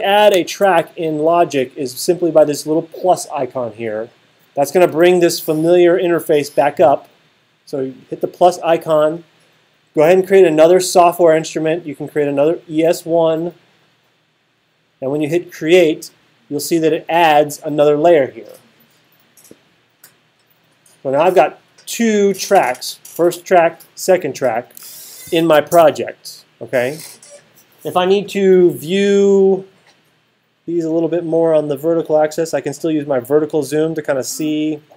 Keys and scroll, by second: 0.3 alt+super+8, 25.3 alt+super+8.